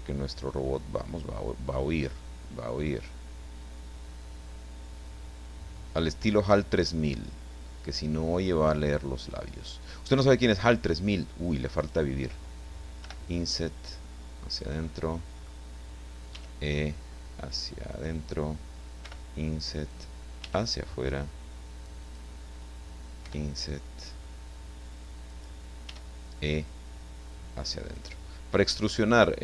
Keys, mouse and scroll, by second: 2.0-9.4 drag, 11.0 click, 11.8 right click, 13.0 i, 14.5 click, 14.9 middle click, 16.3 e, 17.9 click, 19.0 i, 19.9 click, 20.4 e, 22.0 click, 23.2 i, 25.3 click, 25.8 e, 28.0 click, 28.4 scroll down 2, 28.6-29.4 middle drag.